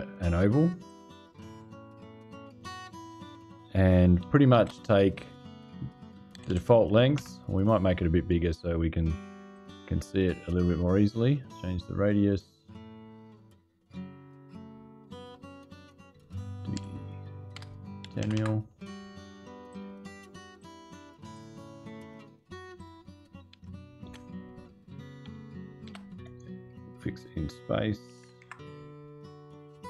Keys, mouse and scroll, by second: 0.6 click, 1.4 right click, 2.5 click, 4.3 shift+v, 6.1 KP_2, 6.2 KP_5, 6.9 KP_Enter, 9.3 click, 11.0 click, 11.3 click, 13.8 click, 14.9 click, 16.5 KP_5, 17.3 BackSpace, 17.8 KP_1, 18.0 KP_0, 18.1 KP_Enter, 19.4 right click, 20.3 ○, 21.1 click, 22.5 click, 23.8 ctrl+v, 25.6 shift+v, 27.8 KP_2, 28.0 KP_5, 28.2 KP_Enter.